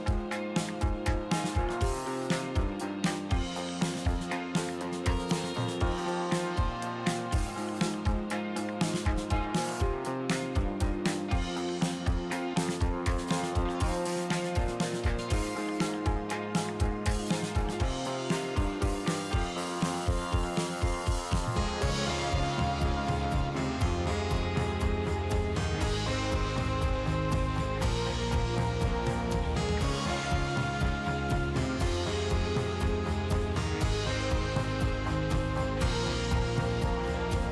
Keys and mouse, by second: 0.9 ctrl+z, 1.0 ctrl+z, 1.2 ctrl+z, 1.4 click, 4.2 ctrl+z, 4.3 ctrl+z, 4.6 ctrl+z, 4.8 ctrl+z, 5.1 ctrl+z, 5.5 middle click, 6.9 ctrl+z, 7.0 ctrl+z, 7.7 middle click, 8.3 click, 10.0 click, 12.0 middle click, 12.9 click, 13.4 click, 13.9 ctrl+z, 15.0 middle click, 17.0 click, 17.8 f, 18.3 f, 18.3 f, 18.3 f, 19.1 shift+click, 20.4 shift+click, 21.2 shift+click, 21.7 middle click, 22.1 shift+click, 22.4 shift+click, 23.5 middle click, 24.3 click, 25.2 f, 26.2-37.5 f, 27.2 ctrl+z, 27.4 click, 27.8 ctrl+z, 28.9 click, 30.5 ctrl+z, 30.6 click, 31.0 ctrl+z, 31.9 ctrl+z, 32.6 click, 33.4 ctrl+z, 34.2 click, 35.2 click, 36.0 middle click, 36.4 click, 36.7 ctrl+z, 36.8 ctrl+z, 37.2-37.5 middle drag.